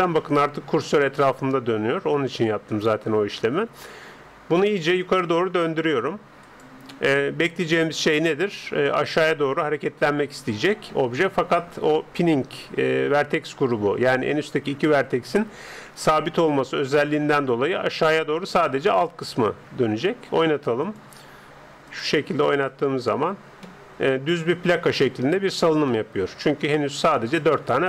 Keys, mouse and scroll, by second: 6.9-10.5 middle drag, 20.9-23.6 drag, 23.6-25.7 middle drag, 25.7-26.1 scroll up 1, 26.1-27.8 middle drag.